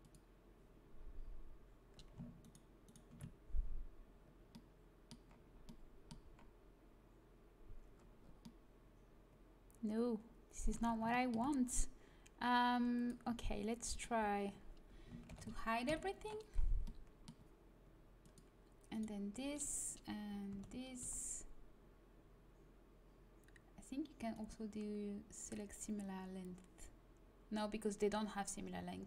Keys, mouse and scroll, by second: 0.0 click, 2.3-5.6 middle drag, 10.7 a, 12.8 right click, 13.4-15.0 drag, 13.8-15.2 right drag, 15.2 ctrl+i, 15.8 h, 16.8 middle click, 18.1-20.4 drag, 20.4 a, 21.0 a, 24.2-26.0 right drag.